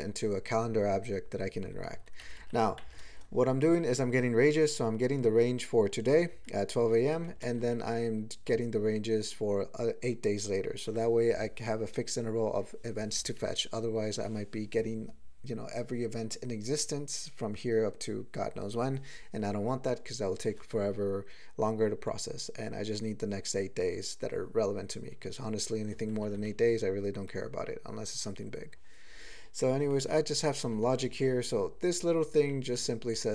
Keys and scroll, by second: 2.2 ctrl+n, 2.4 ctrl+n, 2.8 alt+m, 3.1 ctrl+space, 3.3 ctrl+e, 4.3 ctrl+g, 6.3 ctrl+n, 7.3 ctrl+a, 7.5 ctrl+space, 7.6 ctrl+e, 8.4 ctrl+g, 26.2 ctrl+n, 26.3 ctrl+n, 26.6 ctrl+a, 29.8 ctrl+space, 29.9 ctrl+e, 30.6 ctrl+n, 30.8 ctrl+n, 31.4-32.3 ctrl+n, 32.7 ctrl+p, 33.0 ctrl+e.